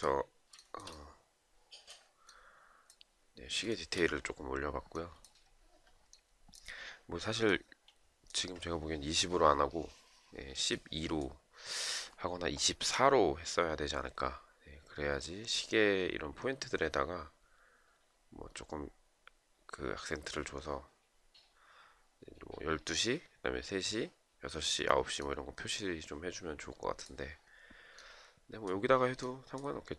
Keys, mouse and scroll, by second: 3.2 shift+right click.